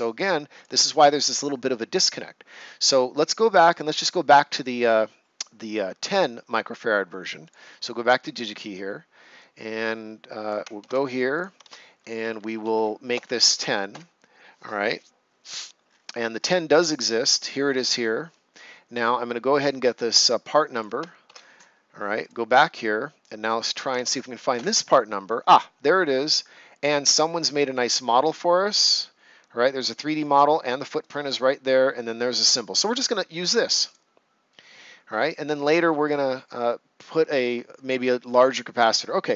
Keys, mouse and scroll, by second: 0.5 click, 3.4 click, 7.4 click, 10.8 ctrl+c, 11.3 click, 13.0-13.9 typing, 15.8 scroll down 1, 17.4 click, 19.8-22.2 drag, 22.2 click, 24.5 Return, 27.6 shift+Return, 27.6 shift+right click, 33.8 click.